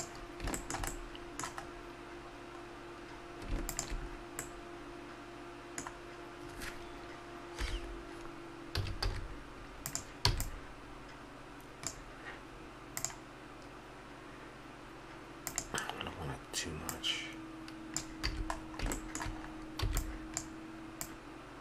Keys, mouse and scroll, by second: 0.6-2.8 middle drag, 3.7 click, 4.1-5.3 middle drag, 7.5 KP_1, 8.7 a, 9.0 z, 10.3 b, 16.8-18.7 drag, 18.3 a, 18.7 middle click, 19.1 middle click, 19.8 b, 21.0-21.6 drag.